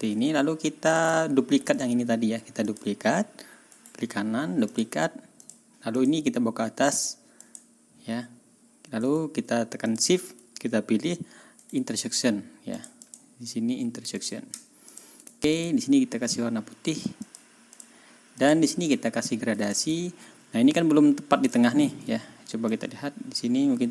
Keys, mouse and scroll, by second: 0.9 click, 1.0 ctrl+middle click, 1.2 ctrl+scroll down 2, 1.7 ctrl+click, 2.6 click, 3.7 right click, 4.7 click, 5.4 click, 5.9 click, 7.4 click, 9.9 shift+click, 11.6 right click, 12.7 click, 14.1 middle click, 14.9 middle click, 15.6 ctrl+middle click, 17.3 middle click, 17.8 middle click, 18.4 middle click, 19.0 ctrl+scroll down 2, 19.3 ctrl+scroll up 2, 19.7 ctrl+middle click, 20.0-20.6 ctrl+scroll up 4, 21.5 ctrl+scroll down 2, 22.7-23.9 drag.